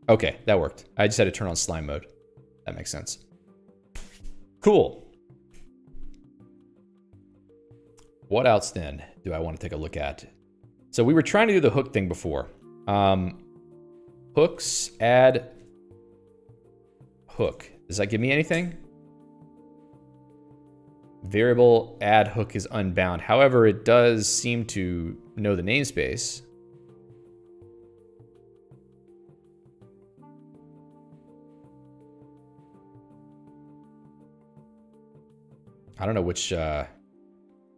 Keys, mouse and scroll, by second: 1.7 click, 2.0 Escape, 2.9 click, 11.6 click, 12.4 Escape, 13.3 a, 14.5-19.2 typing.